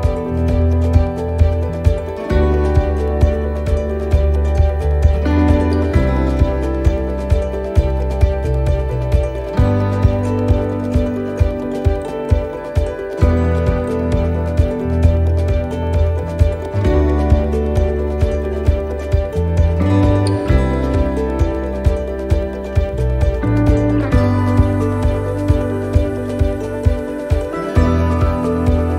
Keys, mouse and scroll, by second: 0.7 middle click, 2.0-2.4 scroll up 5, 2.4 shift+middle click, 3.3 scroll up 3, 3.6 middle click, 4.0 scroll down 2, 4.5 shift+middle click, 4.9 scroll up 2, 5.2 middle click, 5.5 scroll down 2, 6.0 shift+middle click, 6.9 shift+middle click, 7.5 middle click, 7.9 shift+middle click, 8.5 scroll up 1, 9.2 shift+middle click, 9.7-10.2 scroll down 3, 12.2-13.0 scroll down 8, 13.4 middle click, 14.9 shift+middle click, 15.9 middle click, 16.5 shift+middle click, 17.1 scroll up 2, 17.7 shift+middle click, 21.9 shift+middle click, 23.6 middle click, 24.2 shift+middle click, 24.8 scroll up 3, 25.2 middle click, 25.7 shift+middle click, 26.2 scroll up 2, 26.5 middle click, 27.3 right click.